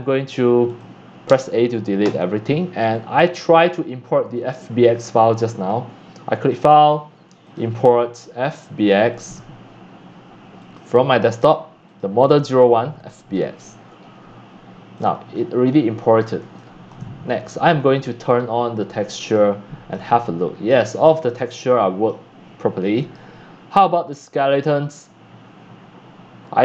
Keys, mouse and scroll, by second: 1.0 click, 1.3 a, 2.0 Delete, 3.0 click, 3.5 click, 4.3 click, 4.6 click, 6.0 click, 6.4 click, 7.4 click, 8.5 click, 10.6 click, 11.4 click, 11.8 click, 13.0 click, 13.1 right click, 13.1 click, 13.3 right click, 14.0 drag, 14.1 scroll up 4, 14.9 middle click, 15.1 middle drag, 15.3 middle click, 15.4 click, 15.9 scroll up 3, 16.9 shift+middle click, 17.7 click, 18.4 middle drag, 18.4 scroll up 2, 18.6 middle click, 19.3 click, 19.4 middle click, 19.9 click, 20.1 scroll up 1, 20.4-20.8 middle drag, 20.8-21.2 drag, 21.4 shift+middle click, 21.7 shift+middle click, 23.3-24.6 drag, 24.6-26.6 right drag.